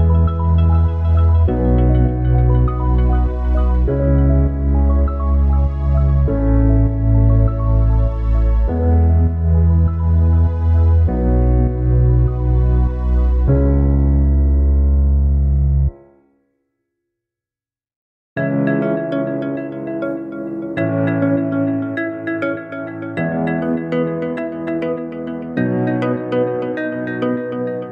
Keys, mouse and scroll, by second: 3.8 click, 5.3-9.5 drag, 13.9 click, 16.7-19.5 drag.